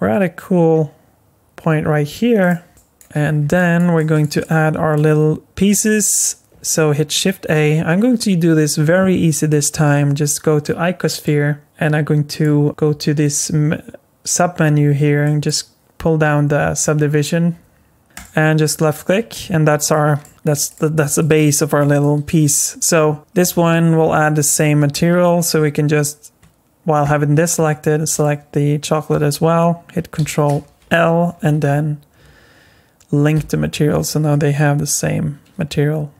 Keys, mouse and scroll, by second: 2.7 shift+middle click, 3.3 scroll up 3, 3.5 middle click, 3.9 shift+middle click, 4.4 middle click, 6.0 scroll up 1, 12.3 click, 15.2 click, 18.1 click, 18.9 click, 19.9 middle click, 20.3 click, 20.3 shift+middle click, 20.7 click, 21.2 middle click, 22.0 shift+middle click, 28.1 shift+click, 30.2 ctrl+l, 31.7 Down.